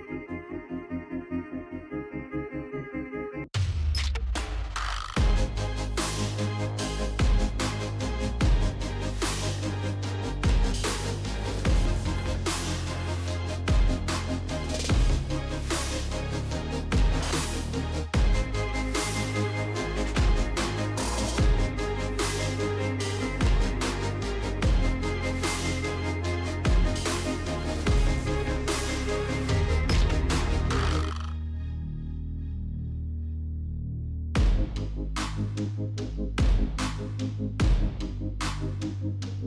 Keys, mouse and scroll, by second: 2.5-3.0 scroll, 5.1 click, 6.7-7.9 scroll, 9.1 click, 9.7 middle click, 10.1 scroll, 11.7 scroll, 15.4 click, 19.0 click, 20.3 click, 20.6-21.8 typing, 23.7 Tab, 24.5 Tab, 24.9 Tab, 25.3 Tab, 25.5-26.3 typing, 30.1 typing, 30.4 Return, 32.2 space, 38.1 space, 38.5 space.